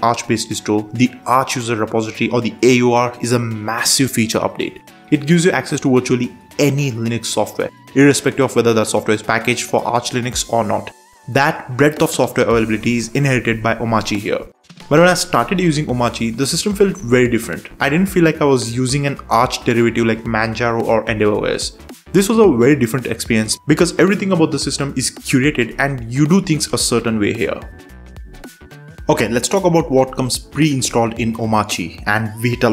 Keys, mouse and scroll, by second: 2.7 BackSpace, 2.9 BackSpace, 3.1 BackSpace, 5.4 click, 8.0-9.1 typing, 9.7 Down, 9.8 Down, 13.7-15.8 typing, 16.6 Down, 17.5 Down, 17.8 Up, 18.1 Down, 18.6 Return, 19.7 5, 20.5 Return, 23.4 click, 23.5 click, 25.7 Return, 27.4 super+Return.